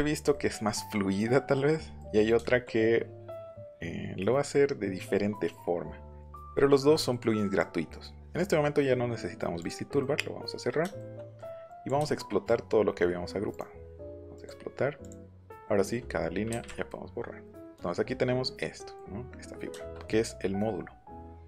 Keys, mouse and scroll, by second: 1.8 middle click, 2.4 shift+middle click, 5.1 middle click, 5.4 middle click, 6.2 click, 6.5 shift+middle click, 6.9 middle click, 7.2 middle click, 7.5 click, 9.6 click, 9.9 middle click, 10.9 shift+middle click, 11.6 click, 12.0 shift+middle click, 13.5 right click, 14.3 click, 15.0 click, 15.3 click, 16.8 middle click.